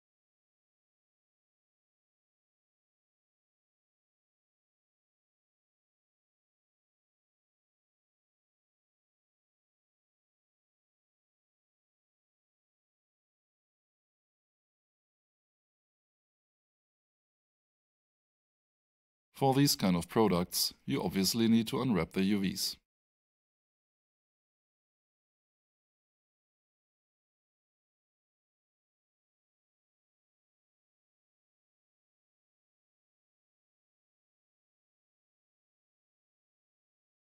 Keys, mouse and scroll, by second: 3.2 0, 3.8 Return, 5.0 click, 12.1 alt+shift+right click, 13.1 alt+shift+middle click, 14.3 alt+shift+click, 18.0 alt+s, 20.3 alt+shift+click, 22.6 alt+shift+right click, 23.8 alt+click, 24.2 alt+shift+middle click, 25.1 alt+shift+click, 25.4 alt+shift+right click, 26.5 alt+shift+middle click, 29.6 alt+shift+right click, 32.0 alt+shift+click, 34.1 alt+shift+right click, 34.4 shift+middle click, 35.4 alt+shift+right click, 36.1 alt+shift+click, 36.9 alt+shift+middle click.